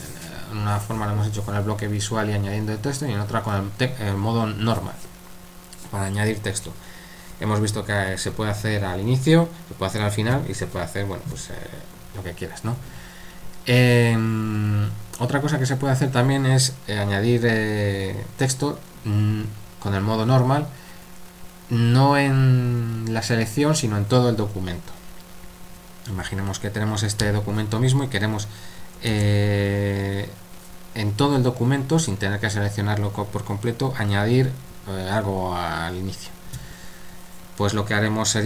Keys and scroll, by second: 29.1 shift+;.